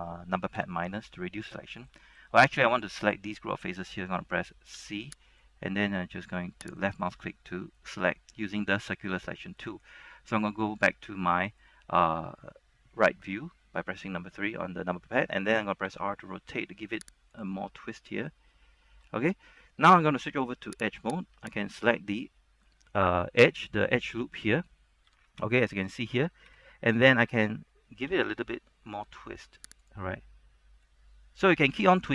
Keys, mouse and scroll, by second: 0.7 ctrl+KP_Subtract, 1.6 middle click, 2.0 scroll up 1, 4.9 typing, 5.5-6.9 drag, 6.9 right click, 7.2 scroll down 1, 7.4 middle click, 8.1 scroll down 1, 8.2 middle click, 10.4 KP_3, 11.0-11.3 scroll up 1, 16.0 r, 17.5 click, 17.7-20.0 middle drag, 21.1 ctrl+Tab, 21.1 click, 21.7 alt+right click, 22.0 middle click, 25.2 z, 25.6 middle click, 26.6 KP_3, 28.2 r, 29.9 click, 30.2 middle click, 31.1 scroll down 1, 31.9 shift+middle click.